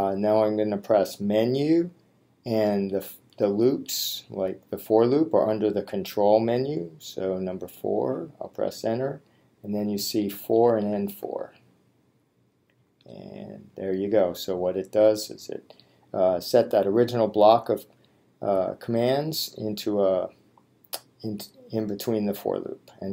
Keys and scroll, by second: 1.3 Menu, 3.0 Down, 8.4 Return, 10.3 Down, 12.9 Return.